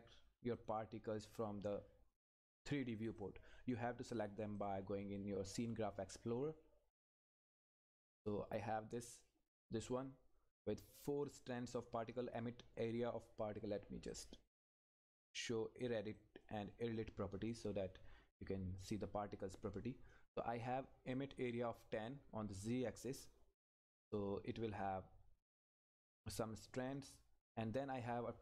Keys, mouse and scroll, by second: 6.5-7.9 scroll down 1, 7.9 click, 14.1-28.4 drag.